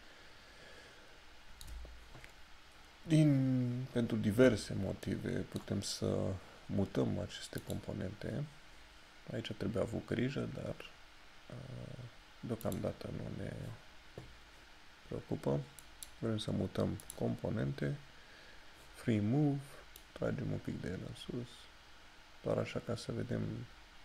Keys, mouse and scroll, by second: 5.2 middle click, 7.7 click, 12.8 click, 15.1 click, 16.2 click, 20.2 click.